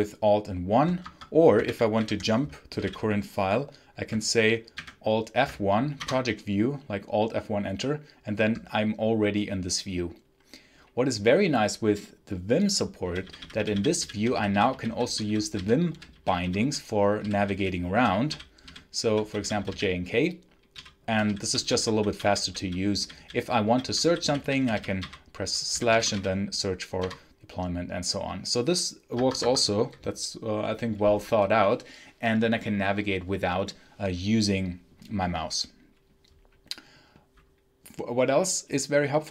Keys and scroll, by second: 0.9 Escape, 1.5 alt+1, 1.8 alt+1, 2.3-3.2 typing, 4.6 alt+F1, 5.8 Return, 12.9-26.5 typing, 26.9 Return, 29.0 Escape.